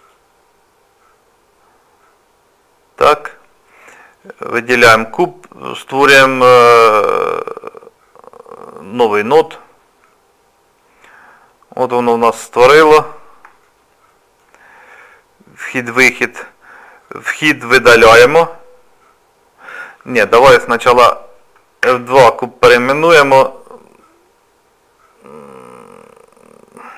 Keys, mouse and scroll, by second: 0.0 click, 0.0 scroll down 4, 4.2 click, 9.5 click, 10.7 scroll up 2, 11.1 scroll down 1, 12.5-13.1 scroll up 5, 13.4 scroll up 1, 13.6 shift+middle click, 17.1 click, 20.5 click, 21.8 F2.